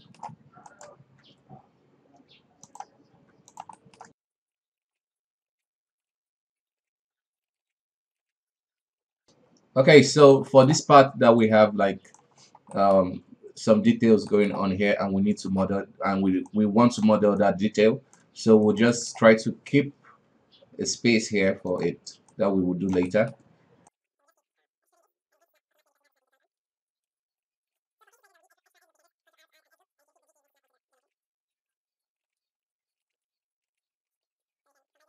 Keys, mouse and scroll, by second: 0.7 shift+right click, 1.2 e, 3.1 r, 3.8-4.1 shift+middle drag, 4.1 e, 4.6 r, 4.9-5.6 scroll down 2, 5.1 e, 5.6-6.1 middle drag, 6.1 e, 6.8 middle click, 6.9 e, 7.5-7.8 shift+middle drag, 7.8 e, 8.2-8.5 middle drag, 8.5 right click, 8.9 right drag, 9.1 shift+right click, 9.3 e, 10.5 middle drag, 10.7-11.4 scroll down 1, 11.4 right click, 12.4 scroll up 2, 12.7-16.5 middle drag, 16.5 right click, 17.4 right click, 18.6 shift+right click, 18.9-19.4 middle drag, 19.4 e, 22.3 right click, 23.1-23.8 middle drag, 23.8 shift+right drag, 23.9 middle drag, 24.1 e, 24.5 middle drag, 24.6 e, 25.5 right click, 26.1 shift+middle click, 26.4 shift+right click, 26.5 e, 27.1 g, 27.5 g, 27.7-28.1 middle drag, 28.1 alt+a, 28.2 middle click, 29.1 ctrl+r, 29.6 middle click, 29.9 g, 30.3 middle click, 30.9 shift+right click, 31.0 shift+middle click, 31.1 e, 31.7 e, 32.2 middle click, 32.4 r, 32.7 e, 33.0 shift+middle click, 33.4 right click, 33.7 middle drag, 33.8 right click, 34.1 shift+right drag, 34.5 shift+right click, 34.7 f, 34.9 middle drag.